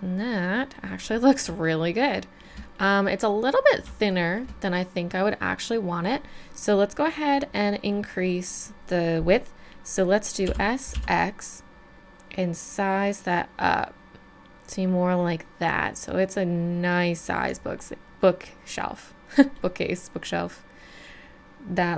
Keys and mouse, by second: 1.0 middle click, 1.8-2.2 middle drag, 2.9-3.6 middle drag, 7.2-8.7 middle drag, 10.5 s, 15.7-17.8 drag, 18.3-18.8 middle drag, 18.8 middle click, 19.4 middle click, 19.7 middle drag, 20.4 middle click, 20.8 middle click, 21.2 middle drag.